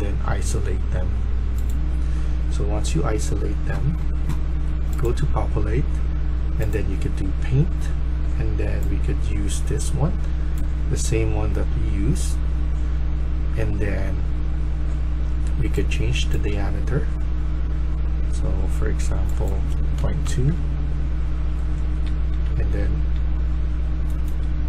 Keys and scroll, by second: 2.8 s, 19.9-20.5 typing, 21.7-22.8 typing, 24.1-24.6 typing.